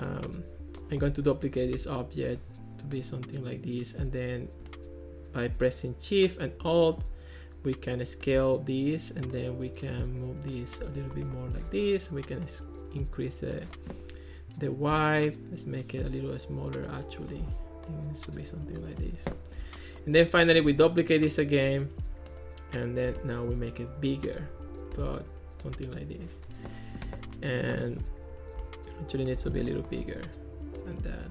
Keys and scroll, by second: 1.7 super+d, 20.7 super+d.